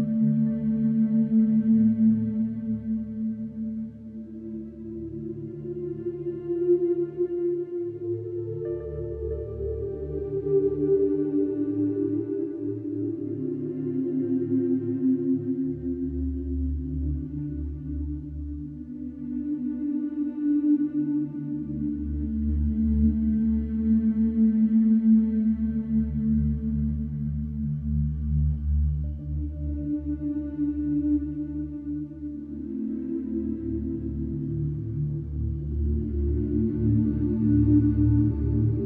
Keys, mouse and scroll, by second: 0.6 Escape, 1.5 middle click, 1.6 middle click, 1.7 middle click, 2.4 middle click, 2.5 middle click, 2.8 middle click, 3.5 middle click, 5.4 click, 5.8 Escape, 7.5-8.6 drag, 10.8-11.9 drag, 11.9 Escape, 13.5-14.6 drag, 16.6 click, 17.0 Escape, 18.5 click, 19.9 click, 20.9 click, 22.1-23.2 drag, 25.6-26.7 drag, 27.6-28.7 drag, 29.9-31.3 drag, 30.3 Escape, 32.7 click, 34.5 ctrl+click, 38.0 click.